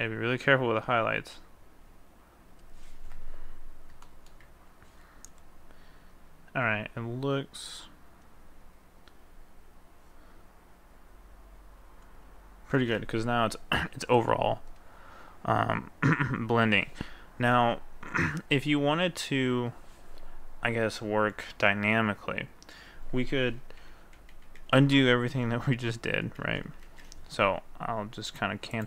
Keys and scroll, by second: 23.8 ctrl+z, 24.2 ctrl+z, 24.5 ctrl+z, 24.7 ctrl+z, 25.0 ctrl+z, 25.3 ctrl+z, 25.8 ctrl+z, 26.3 ctrl+z.